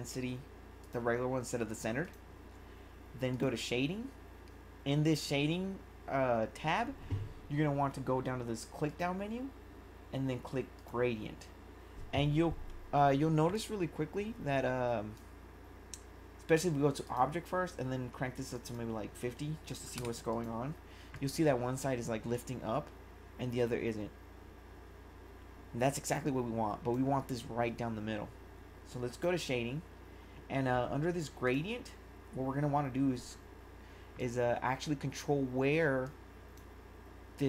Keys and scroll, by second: 19.9 5.